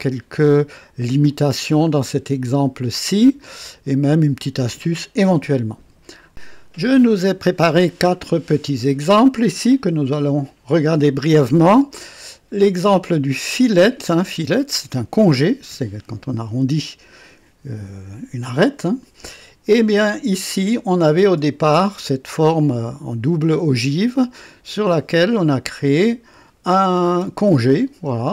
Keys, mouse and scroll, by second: 1.2 click, 3.6 click, 6.3 KP_2, 12.2-13.1 right drag, 21.2 space, 27.0 space.